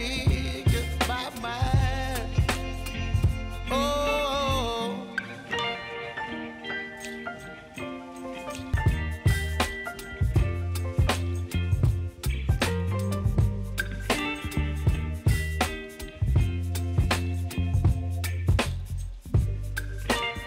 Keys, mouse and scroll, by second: 1.6 Return, 2.2 click, 3.0 Return, 5.0 click, 6.6 Return, 8.6 click, 9.5 Return, 10.8 click, 12.2 Return, 13.3-15.6 drag, 18.1 ctrl+c, 19.6 click, 20.0 ctrl+v.